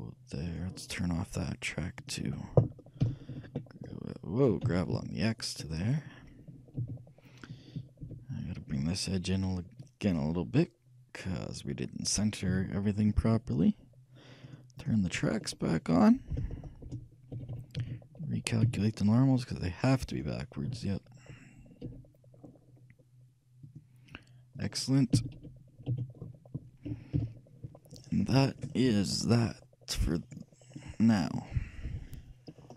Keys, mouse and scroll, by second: 2.0-3.9 drag, 3.1 g, 6.9 a, 8.1 b, 9.8-11.6 drag, 12.6 a, 14.5-16.7 drag, 15.5 middle click, 16.7-18.3 shift+middle drag, 17.4 shift+a, 17.5 shift+a, 17.8 shift+a, 18.7 t, 20.2-22.0 drag, 20.7 a, 22.0 n, 22.1 t, 23.7-26.5 drag, 25.4 t, 25.5 n, 26.0 a, 27.2 KP_Enter, 28.6 middle click, 30.2-32.1 drag, 32.5-32.7 middle drag.